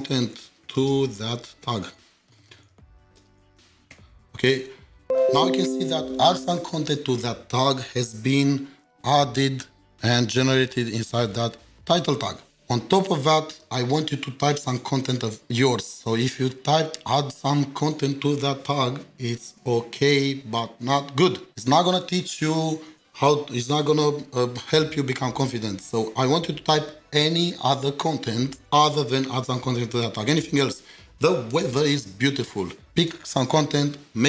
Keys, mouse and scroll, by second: 0.0-4.4 typing, 9.8 ctrl+shift+4, 10.7 double click.